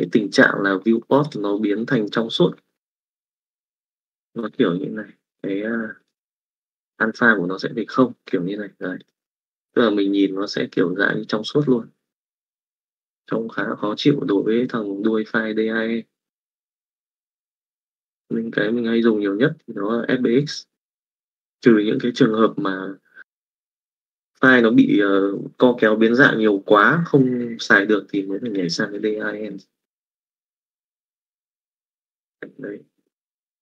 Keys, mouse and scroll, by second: 1.2 click, 4.3-5.9 drag, 8.5 middle click, 9.0 click, 9.5 middle click, 10.5-12.9 middle drag, 28.4 click, 29.5 click, 31.6 middle click.